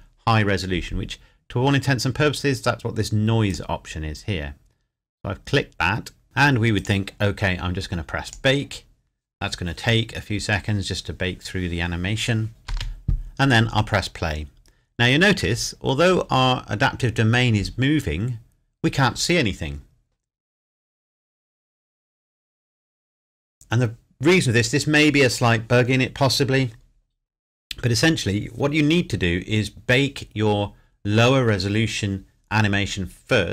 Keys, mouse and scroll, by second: 3.5 click, 6.8 click, 12.7 space.